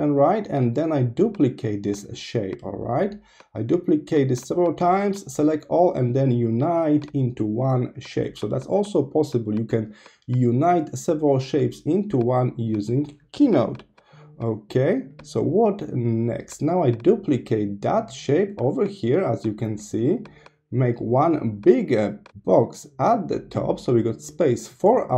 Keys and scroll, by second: 0.1 super+c, 0.2 super+v, 1.5 super+c, 1.6 super+v, 2.9 super+c, 3.0 super+v, 12.3 super+c, 12.4 super+v, 14.8 super+c, 14.9 super+v, 17.7 super+c, 18.1 super+v.